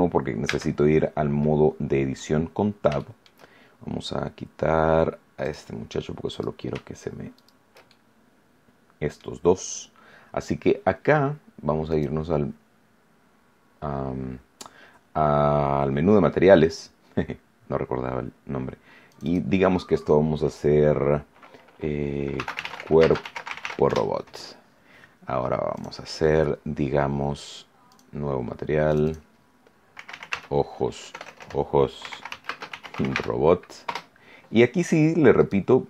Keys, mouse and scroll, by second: 0.5 Tab, 1.3-2.3 middle drag, 2.4 scroll up 1, 2.9 shift+middle click, 5.4 click, 6.3 right click, 7.3 shift+right click, 7.8-9.3 shift+middle drag, 10.9 scroll up 2, 11.9 click, 19.1 click, 22.1-24.1 typing, 25.7 click, 27.9 click, 28.9 click, 29.7-33.6 typing, 33.8 Return, 35.3 right click.